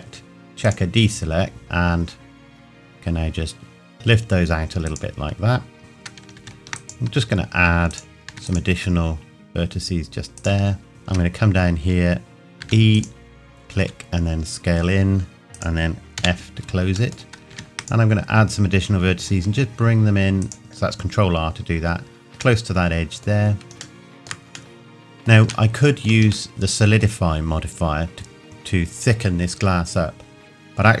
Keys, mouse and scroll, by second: 1.5 s, 4.8 click, 5.6 scroll down 1, 6.8 click, 8.3 ctrl+r, 8.5 ctrl+click, 10.8 scroll down 1, 11.6-12.6 scroll down 1, 12.6 e, 12.9 click, 13.8 s, 15.5 click, 16.2 f, 17.2 middle click, 17.5 ctrl+r, 17.8 click, 20.0 click, 21.0-21.3 scroll up 1, 22.6 middle click, 23.3-23.8 scroll down 1, 24.0 shift+middle click, 25.7 shift+middle click.